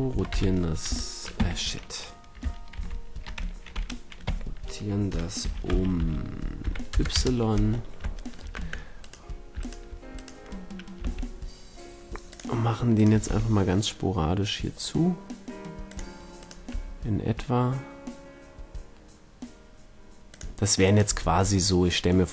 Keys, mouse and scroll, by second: 1.3 Escape, 2.7 ctrl+z, 4.2 Escape, 5.4 r, 7.6 middle click, 8.1-8.9 middle drag, 8.5 Tab, 8.9-11.6 right drag, 11.0 g, 11.8 right click, 12.9-14.0 drag, 13.2 g, 14.2 click, 15.8-16.4 drag, 16.6 g, 20.3-22.3 drag, 20.8 middle click, 20.8 right click, 21.0 g.